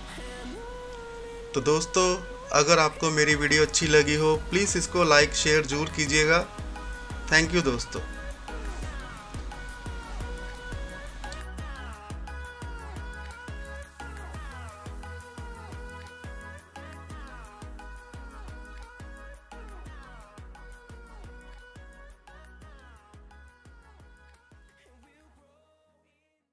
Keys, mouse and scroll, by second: 6.8 scroll up 1.